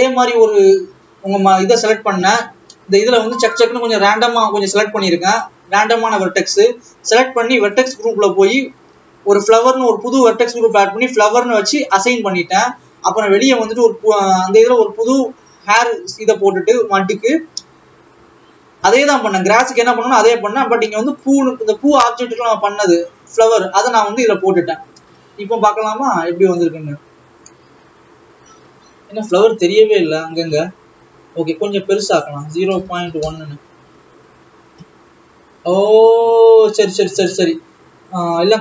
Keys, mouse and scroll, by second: 1.6 click, 2.3 scroll down 1, 2.6 Tab, 2.8-3.8 scroll down 1, 4.0 shift+click, 4.4 shift+click, 12.0 click, 13.0 Tab, 21.3 click, 25.3 alt+a, 27.3-30.7 drag, 33.8-36.5 drag.